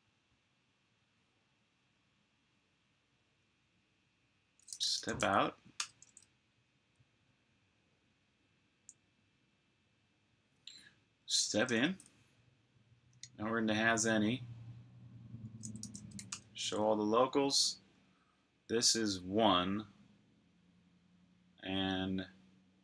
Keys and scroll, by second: 4.4-5.7 typing, 11.3 typing, 15.3-16.3 typing.